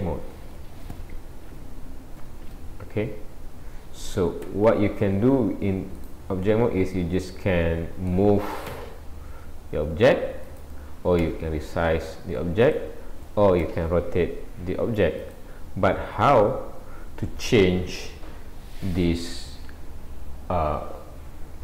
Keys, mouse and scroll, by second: 6.0 click, 6.7 middle click, 7.2 middle click, 8.9 g, 13.6 r, 16.1-17.3 scroll down 4, 17.3-19.9 scroll up 1.